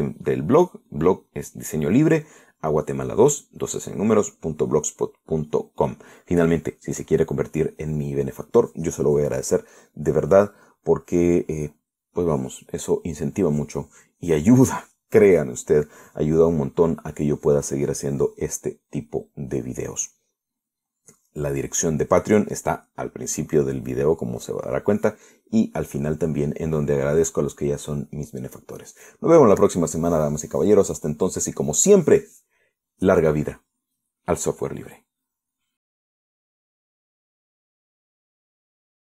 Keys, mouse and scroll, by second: 37.8 click, 38.8 click.